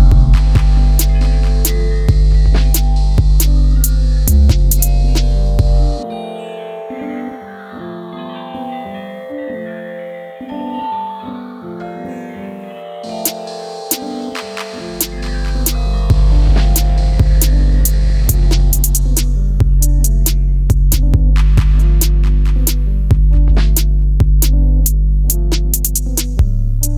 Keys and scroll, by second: 0.0 Down, 0.2 Down, 0.4 Down, 4.1 Down, 4.5 Down, 4.6 Down, 4.9 Down, 5.2 Down, 5.3 Down.